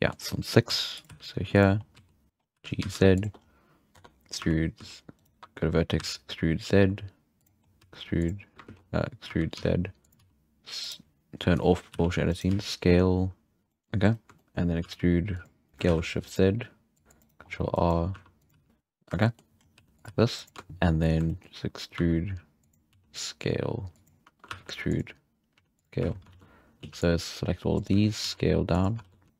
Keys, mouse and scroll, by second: 0.7 s, 1.1 g, 1.8 scroll up 5, 1.9 s, 2.3 middle drag, 2.3-2.8 scroll down 2, 2.5 g, 3.4-3.9 scroll up 5, 3.9 Tab, 4.8 e, 5.3 1, 6.0 e, 7.6 scroll up 1, 7.8 e, 8.7 ctrl+z, 9.3 e, 10.2 s, 11.5 click, 11.9 g, 12.5 s, 13.6 f, 13.7 middle click, 14.4 shift+middle click, 14.8 e, 15.7 middle click, 15.7 s, 17.0 ctrl+r, 17.4-17.7 scroll up 4, 17.7 click, 18.1 r, 18.5 g, 19.2 shift+middle click, 19.6-20.1 scroll up 3, 19.7 r, 20.1 g, 20.9 scroll up 1, 21.2 scroll down 1, 21.3 shift+middle click, 21.9 e, 22.9 s, 24.5 e, 25.5 s, 26.0 z, 26.3 alt+a, 26.8 c, 27.9 z, 28.3 s, 29.0 alt+a, 29.3 right click.